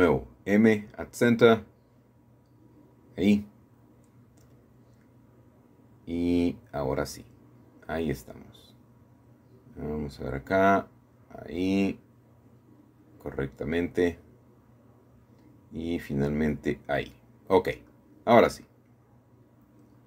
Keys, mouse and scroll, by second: 0.2 m, 2.5-3.6 drag, 5.8 alt+shift+click, 7.7 alt+shift+click, 8.6-9.3 scroll down 2, 9.0 middle click, 9.5 middle click, 10.6 alt+shift+click, 12.3 middle click, 15.1-16.2 alt+shift+middle drag, 16.2-17.3 alt+shift+drag, 16.9-17.7 scroll down 1, 17.3-18.6 middle drag.